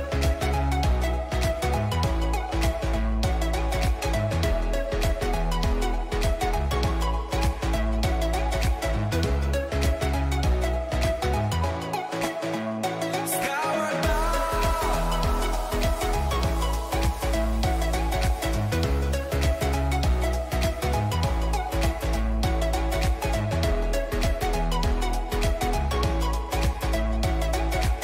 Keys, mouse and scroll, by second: 1.5 middle click, 1.5 a, 2.2-7.3 right drag, 2.8 a, 3.8 a, 6.0-7.2 drag, 7.3 click, 8.8 ctrl+z, 9.6-11.2 right drag, 11.4-13.2 drag, 14.7-16.5 middle drag, 26.4-28.0 middle drag.